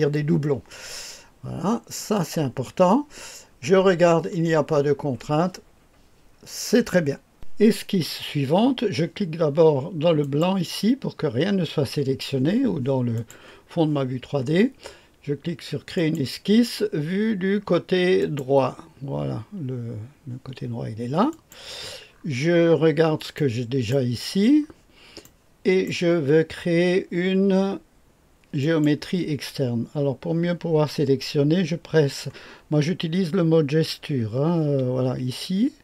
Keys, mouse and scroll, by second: 1.9 click, 7.3 click, 13.1 click, 15.9 click, 18.1 click, 21.3 click, 22.0-23.3 scroll down 3, 23.3 right click, 24.2-24.7 scroll down 2, 25.2 click, 25.8 right click, 28.6 click.